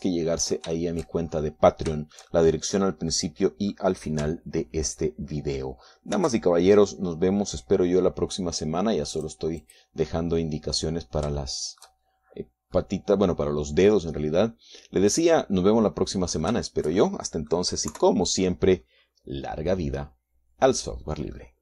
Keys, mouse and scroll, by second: 1.3-2.9 middle drag, 3.0-3.6 shift+scroll up 4, 3.6-5.5 shift+middle drag, 7.8 ctrl+r, 9.2 scroll up 2, 10.8 click, 11.3 click, 11.7-13.7 middle drag, 13.7-14.4 shift+scroll down 1, 14.4-15.7 middle drag, 15.7-16.1 scroll down 1, 16.1-19.3 middle drag, 19.6 KP_3, 20.5-21.5 scroll up 1, 21.5 middle click.